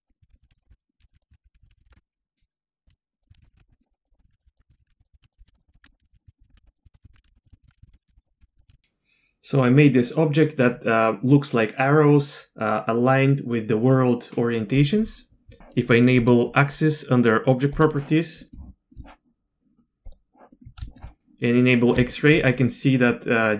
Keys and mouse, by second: 0.0-1.7 typing, 0.1 click, 0.9 click, 1.4 ctrl+z, 2.0 click, 2.3 click, 2.8 Tab, 3.2-8.8 typing, 3.2 click, 3.3 Tab, 3.9 click, 4.2 Tab, 4.6 Tab, 4.8 ctrl+h, 4.9 ctrl+h, 4.9 ctrl+j, 5.0 Tab, 5.9 click, 6.2 click, 6.3 alt+a, 6.4 ctrl+z, 6.8 click, 6.8 alt+a, 7.5 alt+a, 7.5 click, 7.7 alt+a, 8.2 click, 8.5 click, 8.7 alt+a, 8.8 click, 8.8 Tab, 17.7 click, 18.5 drag, 18.9 middle click, 20.1 drag, 20.5 middle click, 20.9 shift+middle click, 22.1 shift+middle click.